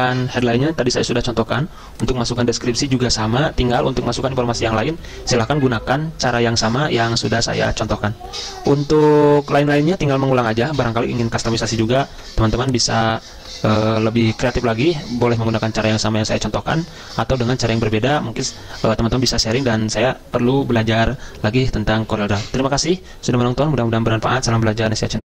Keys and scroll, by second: 13.8 Delete, 15.0 F4.